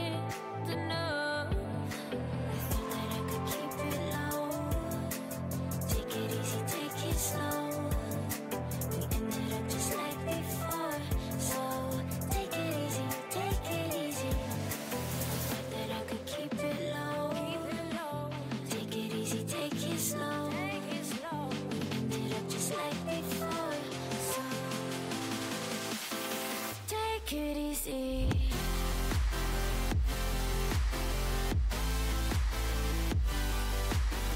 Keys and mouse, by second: 1.1-5.6 drag, 1.1 g, 3.9 g, 10.7-14.1 middle drag, 14.1-15.5 right drag, 15.5 e, 18.4 g, 20.0 g, 21.6 g, 22.5 g, 23.6 e, 25.1 e, 26.6 e, 29.4 e, 30.5 e, 31.9 e.